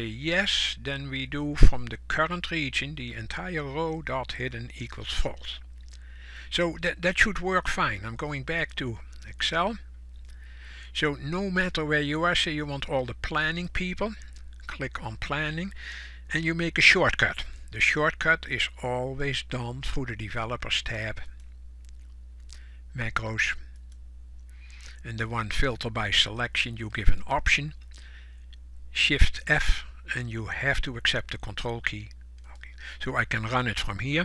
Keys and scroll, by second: 9.5 ctrl+shift+f.